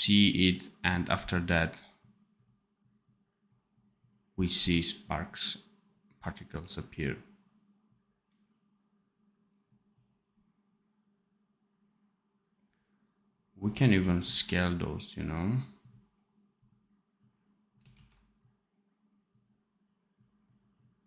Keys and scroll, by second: 13.8 x, 17.8 ctrl+z.